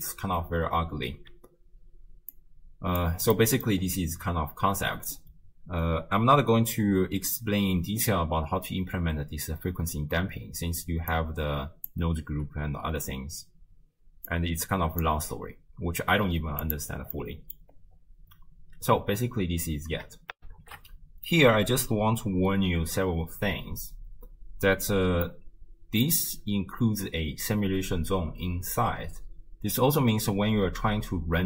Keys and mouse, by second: 1.0 shift+space, 2.3 click, 3.4 middle click, 4.2 middle click, 11.1 click, 11.4 click, 14.3-15.1 drag, 16.7 click, 17.2 click, 20.4 ctrl+alt+shift+q, 25.3 middle click, 25.7 middle click.